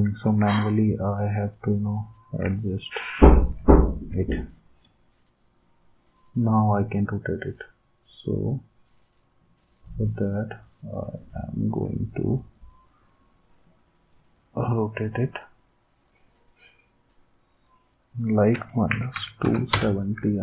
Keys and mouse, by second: 0.8 d, 18.6-20.4 typing.